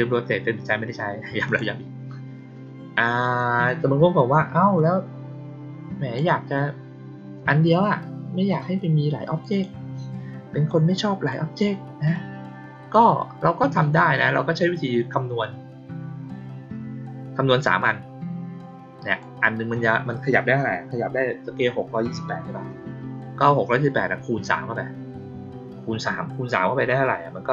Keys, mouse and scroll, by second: 1.4 click, 3.1 click, 4.7-6.1 drag, 9.4 click, 10.6-11.2 drag, 12.0-12.8 drag, 19.0 click.